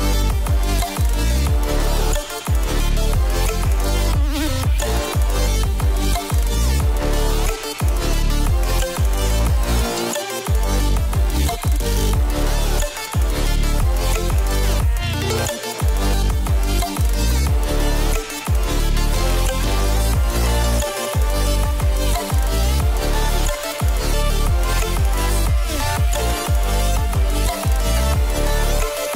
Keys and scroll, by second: 9.7 ctrl+z.